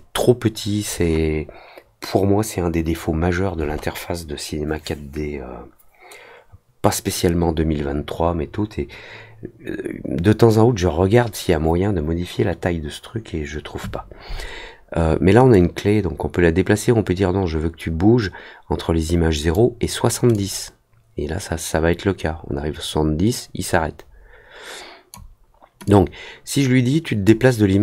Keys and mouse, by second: 15.5-19.5 drag, 20.3-25.1 drag, 25.8-27.2 drag.